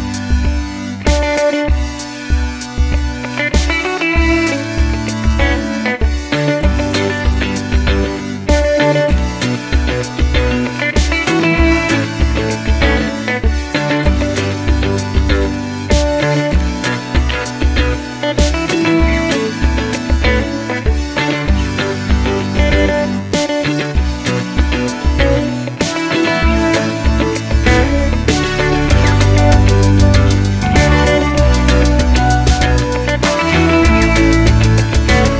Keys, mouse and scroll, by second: 0.7-3.1 middle drag, 2.1 scroll down 2, 2.7-3.1 scroll down 2, 3.1 click, 3.3-3.7 middle drag, 3.7 click, 4.2-7.1 middle drag, 5.7 scroll up 2, 7.1 click, 7.8 click, 8.3-11.7 middle drag, 9.5-10.4 scroll down 2, 10.4 shift+a, 10.5-10.9 scroll down 2, 10.9 click, 11.6 shift+a, 11.7 s, 13.7 click, 16.5-19.0 drag, 19.0 ctrl+v, 20.3 click, 22.2-24.3 drag, 24.3 ctrl+v, 24.8 click, 25.8-29.6 drag, 29.6 ctrl+v, 30.1 KP_Enter, 30.1-31.4 drag, 33.1 click, 33.3 click, 33.9 click.